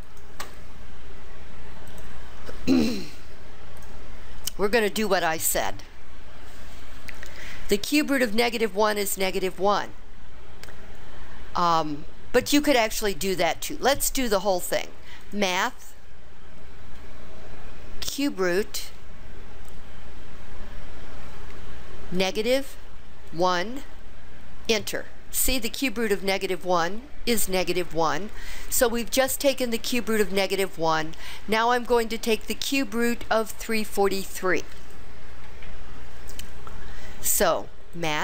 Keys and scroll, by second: 18.3 4, 23.4 1, 24.8 Return.